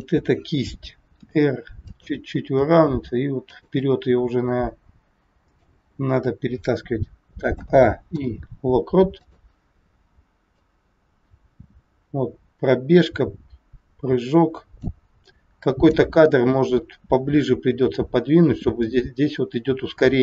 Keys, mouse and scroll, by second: 1.2 r, 2.5 g, 3.9 middle click, 8.1 a, 8.1 i, 10.5 click, 15.2 click, 18.8 click.